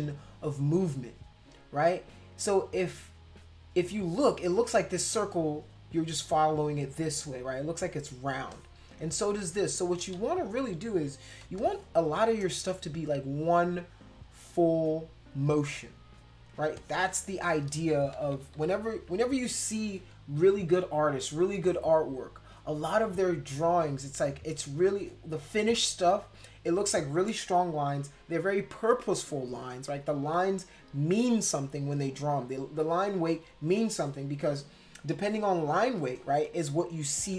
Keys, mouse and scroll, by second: 8.4 space, 8.5 click, 9.4 click, 9.4 space, 10.1 ctrl+x, 11.2 ctrl+z, 11.5 space, 11.6 click, 13.0-15.4 drag, 16.6 space, 16.7 click, 18.1 ctrl+-, 18.3 ctrl+-, 18.5 ctrl+-, 18.8 ctrl+-, 35.4 ctrl+], 36.8-37.2 ctrl+scroll up 2.